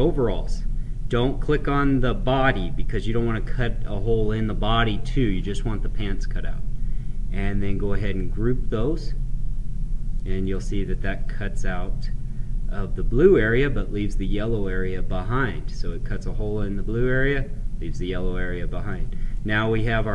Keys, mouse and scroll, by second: 8.0 click, 10.4 click, 10.8-18.2 right drag, 18.9-20.1 right drag.